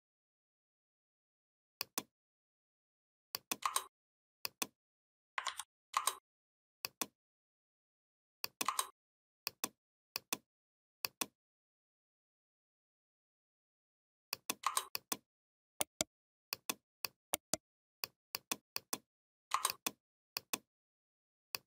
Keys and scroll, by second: 5.3 ctrl+z.